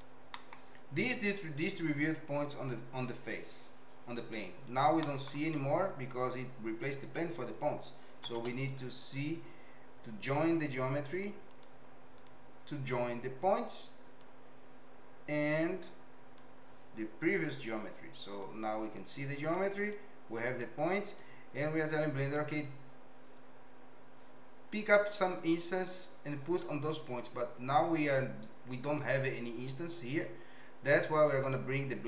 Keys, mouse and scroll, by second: 0.3 middle click, 5.1 middle click, 8.2 shift+a, 14.2-16.3 drag, 18.4-19.6 drag, 19.9 click, 21.2-22.3 drag, 29.5 click, 31.3 click.